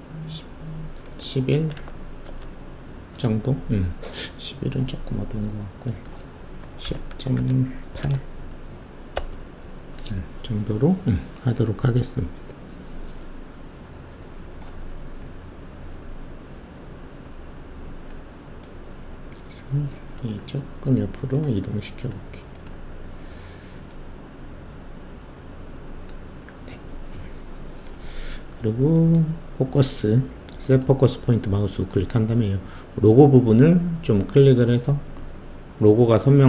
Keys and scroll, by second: 1.5 typing, 2.2 Return, 6.6-8.7 typing, 9.1 Return.